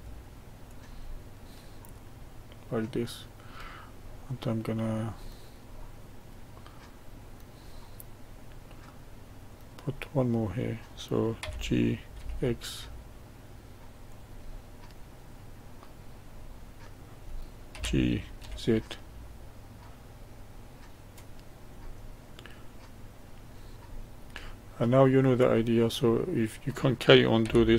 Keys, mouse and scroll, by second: 1.1-5.2 middle drag, 5.2-5.8 scroll down 1, 5.8-9.4 middle drag, 9.4 click, 11.4 g, 14.4-15.6 middle drag, 15.6-16.4 scroll up 2, 16.4-17.7 middle drag, 17.7 g, 22.0-23.9 middle drag, 23.9-24.4 scroll up 1, 24.4-25.6 middle drag, 25.6-26.2 scroll down 1, 26.2-27.4 middle drag, 27.4 g.